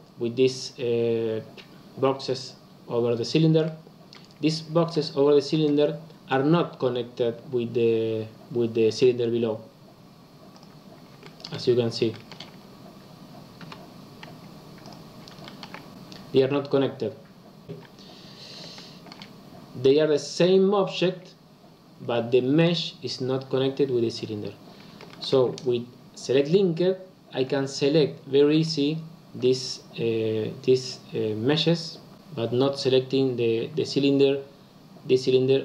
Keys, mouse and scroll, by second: 3.6-7.9 middle drag, 10.7 click, 11.2 shift+middle click, 11.6-12.1 scroll up 2, 12.1 shift+middle click, 12.5-13.5 scroll down 1, 13.5 l, 14.8 click, 15.4 shift+middle click, 15.7 scroll down 1, 15.9 g, 18.7-21.7 shift+middle drag, 22.1-23.2 scroll up 1, 23.2-25.1 scroll up 1, 25.1 shift+middle click, 25.5 click, 27.4 l, 28.5 l, 29.4 l.